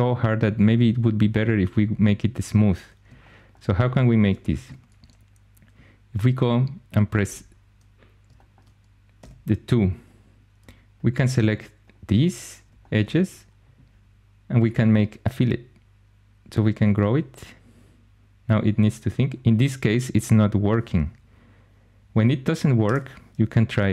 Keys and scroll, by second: 4.1 shift+super+e, 7.1 3, 8.7-9.6 typing, 22.7 Escape.